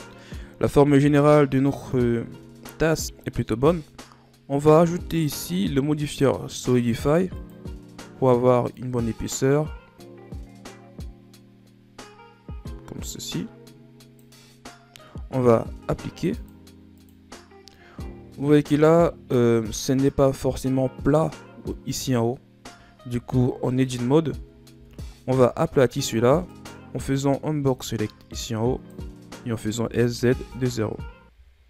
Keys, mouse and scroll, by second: 1.1 KP_1, 3.0 ctrl+scroll down 3, 3.2-5.0 middle drag, 5.0-8.1 drag, 8.6-11.7 drag, 16.3-18.1 drag, 18.1-18.6 shift+scroll up 4, 18.6 middle click, 19.0-19.5 scroll up 1, 19.5-22.6 middle drag, 23.2 KP_1, 24.1-24.6 shift+scroll up 2, 24.6 Tab, 25.2 z, 26.4 right click, 26.9 b, 29.8 s.